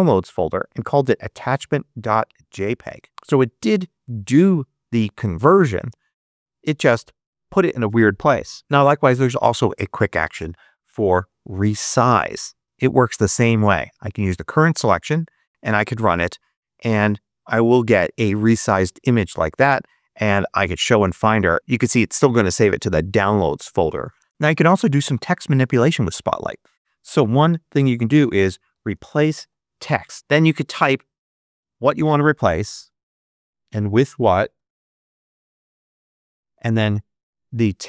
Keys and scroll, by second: 4.0 space, 5.6 space, 8.6 super+space, 9.1 super+space, 10.7-12.3 typing, 12.6 Return, 15.1 Tab, 15.5 Return, 23.4 space, 24.3 ⟳, 27.2-29.8 typing, 30.1 Return, 32.3-36.4 typing.